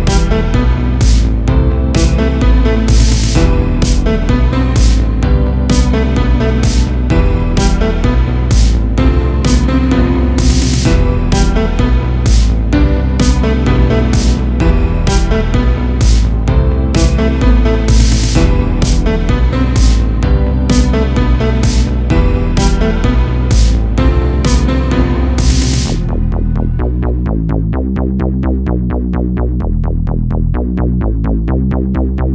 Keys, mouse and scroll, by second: 1.0 click, 1.7 click, 2.3 Tab, 4.0 l, 4.7 middle click, 5.3-5.7 scroll up 1, 5.7 middle click, 6.6 KP_1, 7.4 g, 9.5 KP_0, 10.4 a, 10.5 a, 10.8 Tab, 11.2 click, 11.6 Tab, 12.1 a, 13.8 s, 15.3 click, 15.6 Tab, 16.2 a, 16.3 a, 16.8 scroll down 1, 18.0 click, 19.8-20.2 drag, 20.2 scroll up 3, 20.9 click, 24.9 a, 25.1 a, 25.5-25.9 scroll up 1, 25.9-26.8 shift+middle drag, 26.8 click, 27.2 Tab, 27.4 3, 27.5 click, 28.1 g, 30.3 a, 30.4 a, 30.7 Tab, 31.0 scroll down 3, 31.2 a, 31.4 a, 32.0-32.3 shift+middle drag.